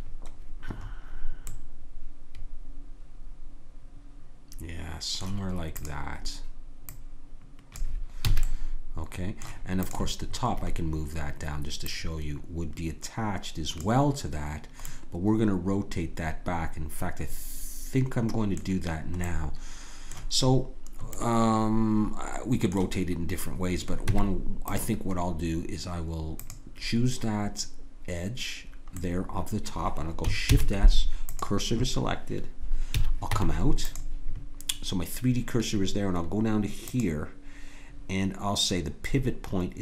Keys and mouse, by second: 5.8-7.7 drag, 8.3 a, 9.8-11.7 drag, 11.7 middle click, 11.9-13.8 drag, 14.9-16.9 middle drag, 19.2 middle click, 24.1 Tab, 26.4-27.5 drag, 28.5-30.5 middle drag, 30.5 shift+s, 32.9 a, 33.3 Tab, 36.9-38.9 drag.